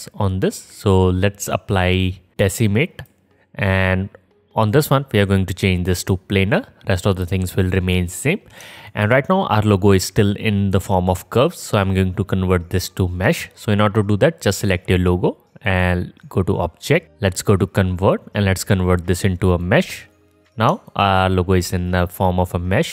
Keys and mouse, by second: 6.2-22.0 drag, 15.7-22.0 middle drag, 15.7-22.0 right drag.